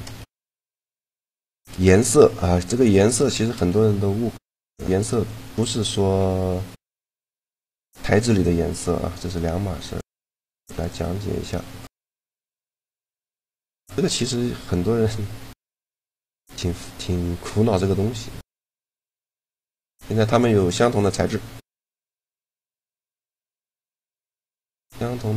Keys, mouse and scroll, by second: 0.0 shift+g, 3.2 shift+g, 6.7 click, 6.8-8.0 right drag, 8.5-10.6 drag, 11.4-13.8 right drag, 12.9 ctrl+l, 19.6-22.8 right drag, 22.8-24.0 middle drag.